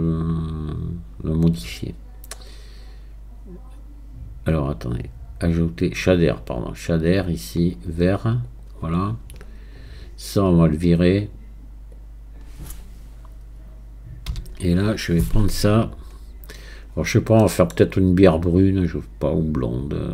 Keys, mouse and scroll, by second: 14.3 x, 15.9-16.9 drag, 16.9-17.4 scroll up 4, 17.4-18.6 middle drag, 18.6-20.1 drag.